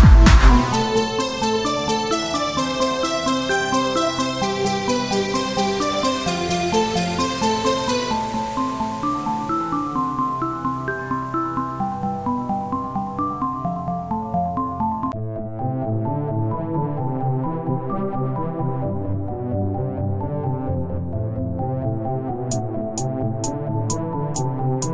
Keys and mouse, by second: 0.2 right click, 4.2 KP_1, 4.7 z, 5.9 z, 6.5 z, 6.7 right click, 7.4 click, 8.0-9.0 drag, 8.5 right click, 8.5 z, 9.7 z, 9.7-10.8 right drag, 11.8 Tab, 11.8 z, 13.3 Tab, 13.8 KP_3, 14.3 z, 14.6 c, 16.6-17.7 drag, 16.6 c, 18.3 z, 18.6 z, 18.8 c, 19.5-20.9 drag, 21.5 b, 23.2 e, 24.8 s.